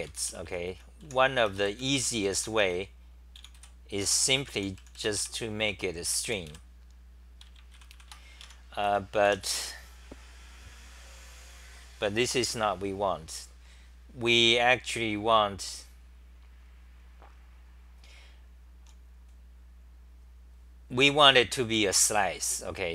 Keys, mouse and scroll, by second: 0.0-2.0 typing, 0.1 Home, 3.3-7.0 typing, 7.9 ctrl+c, 8.8 Home, 8.8 r, 9.2 2, 21.7 ctrl+g.